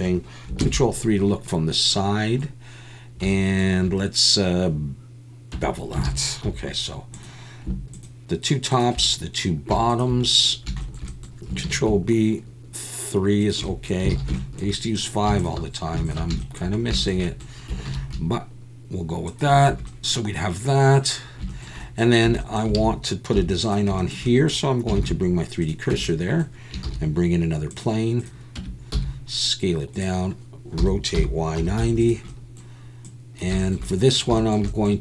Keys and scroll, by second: 5.5 Tab, 6.0 alt+a, 6.4 2, 11.6 ctrl+b, 14.1 alt+a, 17.9 ctrl+b, 19.7 Tab, 22.3 Tab, 22.8 alt+a, 23.3 3, 25.0 shift+s, 25.9 Tab, 26.8 shift+a, 28.6 Tab, 28.9 s, 30.8 r, 31.1 y, 31.6 9, 31.8 0.